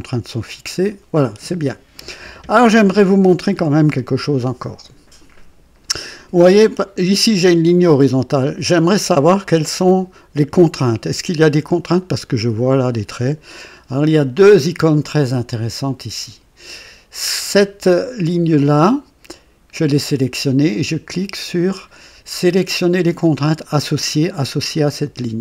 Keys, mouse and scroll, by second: 1.9-2.7 right drag, 8.2 click, 24.8 click.